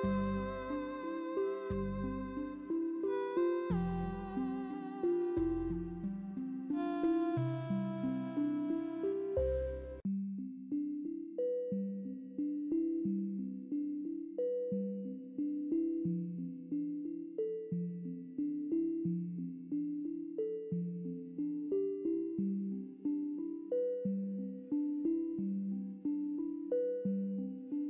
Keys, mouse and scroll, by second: 0.1 Right, 0.6 click, 1.5 Up, 2.1 click, 2.1 scroll down 1, 2.6 scroll up 1, 2.8 click, 3.2 click, 3.5 scroll down 1, 3.9 scroll up 1, 3.9 click, 4.3-6.8 typing, 4.4 click, 4.7-5.2 scroll down 2, 4.9 click, 5.2 click, 5.3 click, 5.9-6.5 scroll down 2, 6.5 click, 6.8 click, 7.5-8.2 scroll up 2, 7.6 click, 7.9 space, 8.2 click, 8.4 scroll down 1, 8.6 space, 8.6 click, 8.9 ctrl+c, 8.9 ctrl+v, 9.0 click, 9.7 scroll up 1, 9.8 ctrl+z, 10.2 scroll up 1, 10.3 ctrl+z, 10.5 click, 10.8 ctrl+c, 10.8 ctrl+v, 11.3 scroll down 1, 11.8 click, 11.9 space, 11.9-12.4 scroll up 2, 12.0 click, 12.3 space, 12.5 click, 13.7 scroll down 1, 13.7 space, 13.9 scroll up 1, 13.9 click, 15.3 scroll down 1, 15.5 space, 15.5 click, 17.2 click, 17.2 d, 17.3 click, 17.5 scroll up 1, 17.6 ctrl+v, 17.8 click, 18.1 scroll up 1, 18.2 space, 18.4 z, 18.4 click, 19.0 ctrl+v, 19.1 shift+Up, 19.2 Left, 19.3-19.8 scroll down 2, 19.4 shift+click, 19.7 space, 19.9 shift+click, 20.8 scroll up 1, 20.9 click, 21.6 click, 22.1-22.6 scroll up 2, 22.2 click, 22.2 space, 22.4 click, 22.4 space, 22.6 click, 22.7 scroll down 1, 22.9 click, 23.6 click, 23.6 scroll down 1, 23.7 space, 24.1 click, 24.1 space, 24.3 click, 24.7 ctrl+c, 24.8 space, 24.8 click, 25.2 v, 25.3 click, 25.8 ctrl+c, 25.8 ctrl+v, 25.9 ctrl+z, 26.0 click, 26.1 ctrl+v, 26.5 d, 26.5 click, 26.6 scroll up 1, 26.7 click, 27.6 click.